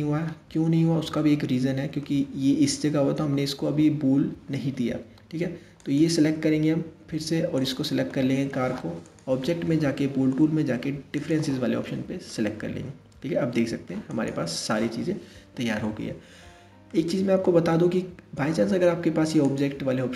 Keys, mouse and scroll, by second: 0.1-0.5 scroll up 2, 0.8-3.9 middle drag, 5.4 click, 7.2 shift+click, 8.7-11.8 drag, 11.9-13.6 middle drag, 13.6 scroll up 1, 13.7 click, 14.5-16.5 scroll down 3, 16.5-19.0 middle drag, 19.0-20.1 drag.